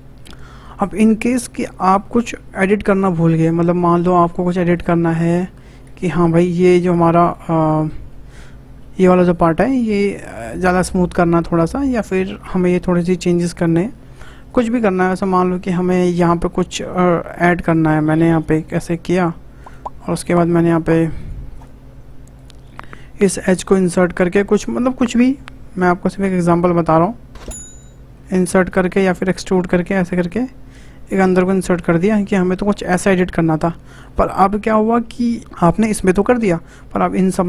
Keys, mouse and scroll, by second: 0.3-3.4 shift+middle drag, 4.2-4.6 scroll up 2, 4.6-5.3 shift+middle drag, 5.3-5.6 scroll up 1, 5.6 shift+middle click, 6.4 click, 6.5 Tab, 6.6 Tab, 7.2 click, 7.3 Tab, 7.6 click, 7.9 Tab, 8.1 middle click, 8.5 scroll up 2, 8.8-11.8 shift+middle drag, 14.3 shift+middle click, 14.9 click, 15.4 middle click, 15.9-16.6 scroll up 2, 16.8-18.4 drag, 18.4 ctrl+b, 20.4 click, 21.5 click, 22.3 click, 23.7 i, 28.9 e, 30.7 e, 31.8 click, 31.9 Tab, 32.2-32.8 scroll down 5, 32.9-34.2 middle drag, 34.2-35.1 scroll down 4, 35.1 scroll down 1, 37.2-37.4 shift+middle drag.